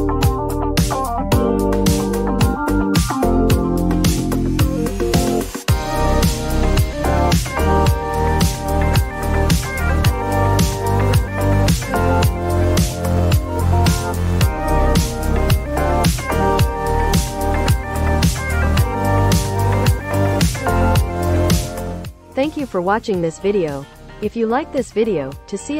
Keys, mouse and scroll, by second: 0.9 click.